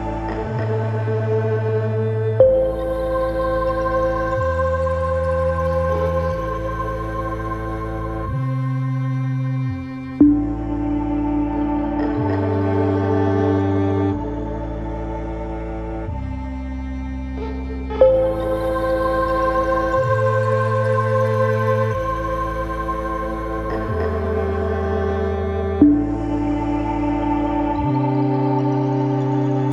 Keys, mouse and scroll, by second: 0.6 click, 1.5 g, 3.6-4.1 drag, 4.1 g, 6.6-8.1 middle drag, 8.1 KP_1, 9.6 shift+click, 10.4 shift+click, 11.3 ctrl+j, 13.7-14.8 drag, 14.8-15.3 middle drag, 15.3 Tab, 16.5 click, 17.7-18.7 right drag, 18.7 middle click, 19.5 click, 20.2 x, 21.8 KP_1, 23.1 ctrl+r, 25.6-26.1 scroll up 1, 26.1 1, 27.2 click, 28.1 shift+click, 29.2 shift+click.